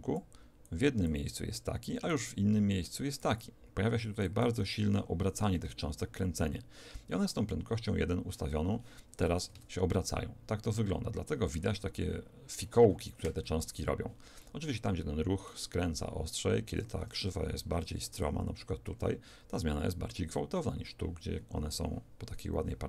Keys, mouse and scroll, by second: 1.8-4.4 d, 5.4 d, 9.6 alt+a, 14.4-16.7 middle drag, 16.7 Escape, 18.2 d, 18.2 click, 18.9 d, 19.8 d.